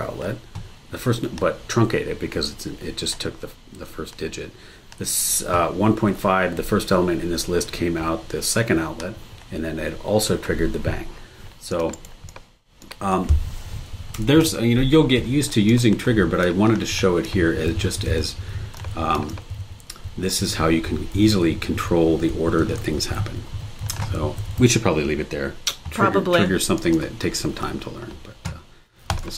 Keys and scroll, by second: 11.9 super+e, 14.2 BackSpace.